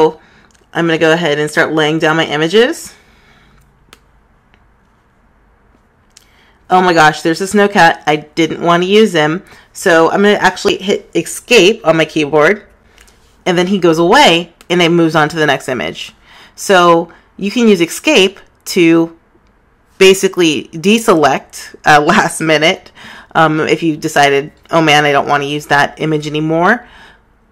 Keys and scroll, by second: 14.9 ⟲.